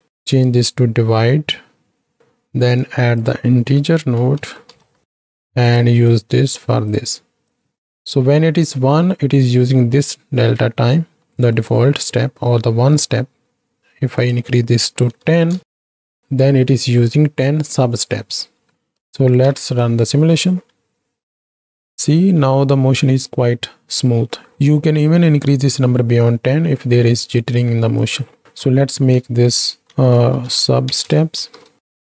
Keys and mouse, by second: 0.5-2.2 drag, 2.8-5.8 drag, 6.2 click, 7.6 click, 11.4 middle click, 12.9 click, 14.2-15.6 drag, 17.0 middle click, 19.1 shift+Right, 19.1 shift+Left, 19.3 shift+Right, 19.5 shift+Left, 20.5 space, 21.8 shift+Left, 21.8 shift+Right, 22.2 space, 28.1 click, 28.6 F2.